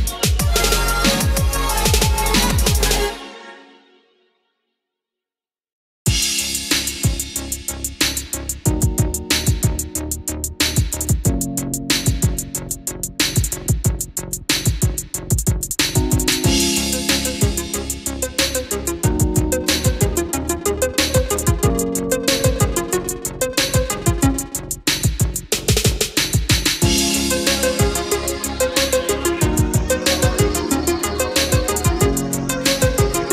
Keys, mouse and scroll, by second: 2.7 click, 4.3 space, 4.7 click, 5.4 middle click, 9.0 click, 21.6 middle click, 23.1-23.4 scroll up 1, 23.5-24.7 middle drag, 25.1 click, 25.9-26.5 scroll down 1, 27.2 click.